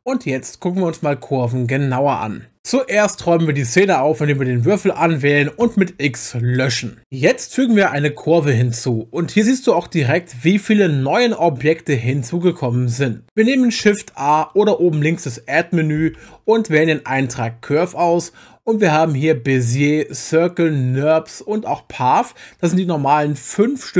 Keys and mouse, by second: 4.7 click, 13.8 shift+a, 16.2 shift+a.